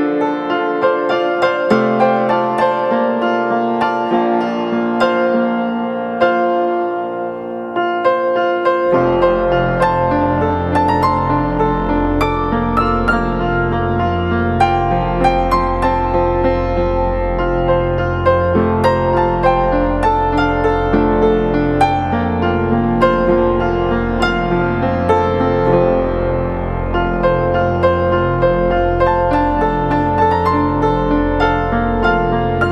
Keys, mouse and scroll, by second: 3.7 [, 7.7 [, 9.3 ctrl+click, 10.2 right click, 14.1-15.2 scroll down 1, 16.4 ctrl+click, 21.0 alt+click, 30.4 6.